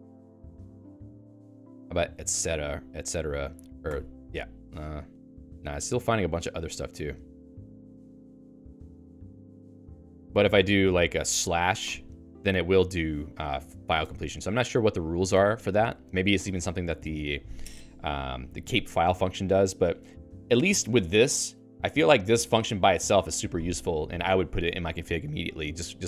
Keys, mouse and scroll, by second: 1.3 ctrl+g, 1.8-3.0 typing, 3.9 ctrl+alt+i, 5.1-7.6 Down, 7.7 Page_Down, 7.9 Page_Down, 8.1 Page_Down, 8.3 Page_Down, 8.4 Page_Down, 8.6 Page_Down, 8.8 Page_Down, 8.9 Page_Down, 9.1 ctrl+g, 9.8-11.2 typing, 11.8 ctrl+alt+i, 13.7 ctrl+g, 14.0 Escape, 14.9-19.0 typing, 24.7-26.0 typing.